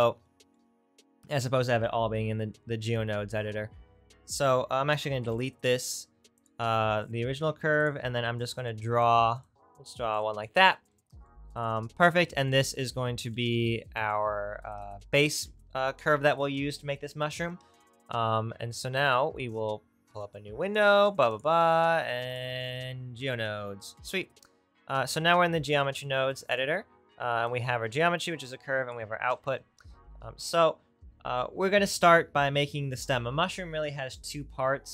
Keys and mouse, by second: 7.8-9.4 right drag, 9.4-15.4 middle drag, 15.4 Tab, 23.0-34.9 drag, 29.2 n.